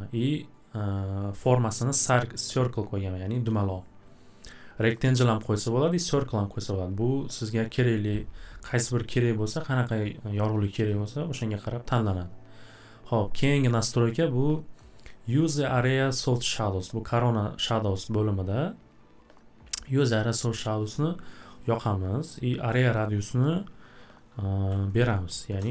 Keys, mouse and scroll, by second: 4.9 click, 6.2 click, 9.0 click, 15.2 click, 21.6 click, 21.9 click, 22.8 click, 22.9 click, 24.7-25.7 typing.